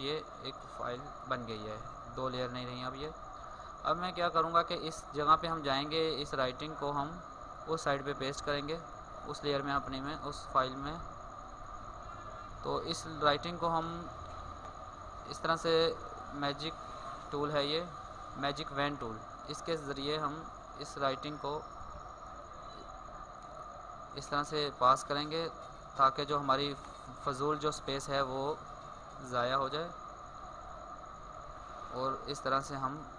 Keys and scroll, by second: 0.7 alt+space, 3.8 alt+space, 5.2 ctrl+space, 6.1 ctrl+space, 9.8 ctrl+space.